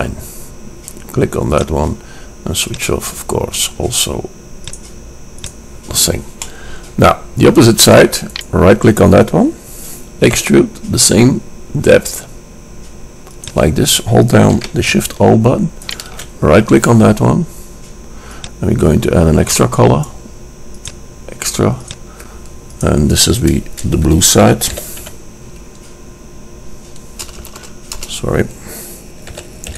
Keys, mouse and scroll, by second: 6.6-8.7 middle drag, 8.7 click, 10.2 click, 10.4 e, 16.2-17.8 drag, 18.5-20.5 drag, 21.0-24.7 drag, 27.6 BackSpace, 27.8 BackSpace.